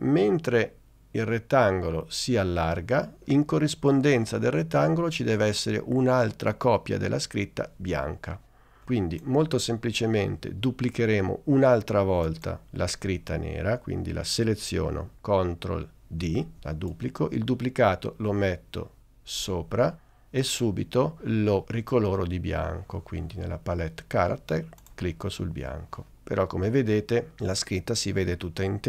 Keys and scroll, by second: 16.3 super+d.